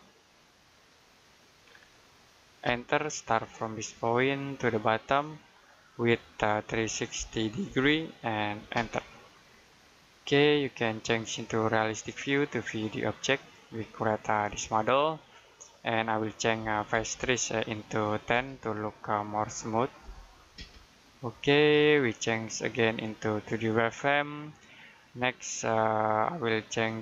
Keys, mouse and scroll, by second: 1.5-1.8 scroll down 1, 1.8 middle click, 2.5 space, 2.9-3.3 scroll up 1, 4.1 click, 6.5 3, 8.6 space, 9.5 middle click, 10.0-11.1 scroll up 1, 11.1 click, 13.0-13.5 scroll down 1, 13.5 middle click, 15.2-16.5 scroll up 1, 16.5 f, 18.2 space, 19.3 typing, 20.4 space, 22.5 click, 24.4 middle click, 25.0-27.0 scroll up 1.